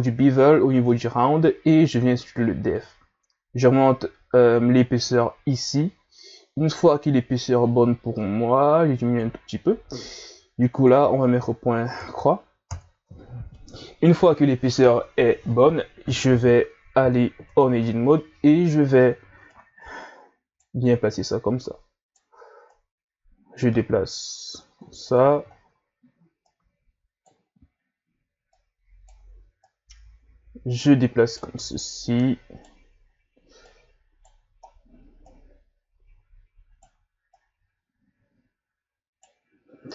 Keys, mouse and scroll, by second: 2.8-5.8 drag, 10.7-13.8 drag, 17.5 Tab, 18.7 ctrl+scroll up 3, 19.5 right click, 21.1 right click, 22.7 right click, 24.8-25.8 scroll down 7, 26.4 right click, 27.8-28.5 scroll up 1, 28.5 right click, 29.6 right click, 32.0 right click, 33.7 right click, 34.7-35.1 scroll down 1, 35.3 right click, 37.3 right click.